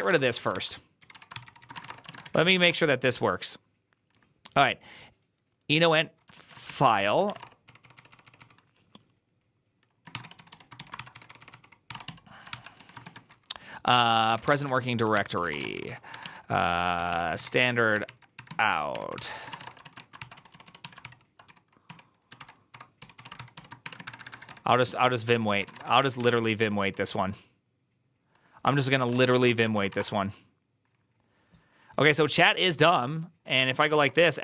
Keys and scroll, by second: 0.0-2.1 typing, 0.4 ctrl+c, 2.3 ctrl+c, 2.5 Up, 2.5 Return, 6.2 ctrl+a, 6.5-8.7 typing, 6.8 ctrl+c, 9.8-17.8 typing, 17.9 ctrl+n, 18.4 ctrl+y, 18.8 Tab, 19.0 ctrl+c, 19.1-27.4 typing, 25.2 ctrl+c, 25.3 ctrl+c, 28.6-30.2 typing.